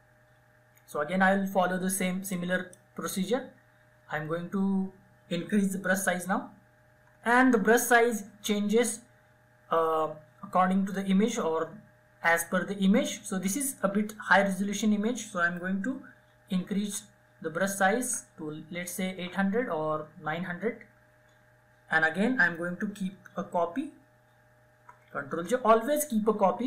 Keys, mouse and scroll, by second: 1.5-5.0 drag, 5.0-6.1 ], 8.2 typing, 15.5-17.7 typing, 21.8 ctrl+Num_Lock, 24.0 ctrl+j.